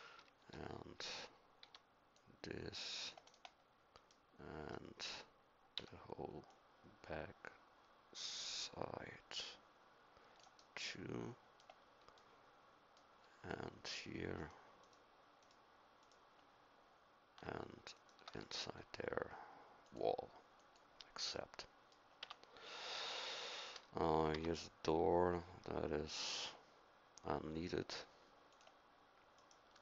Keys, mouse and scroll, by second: 0.4 v, 1.6 c, 5.7 c, 21.4 middle click, 22.2 Tab, 24.3 Tab.